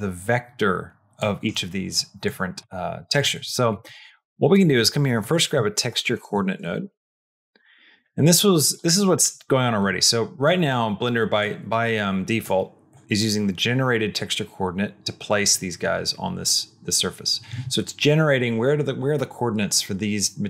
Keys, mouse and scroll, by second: 1.0 click, 2.1 click, 3.2 middle click, 3.5 click, 3.8 shift+a, 8.7 click, 9.6 click, 11.2-12.7 drag, 12.7 click.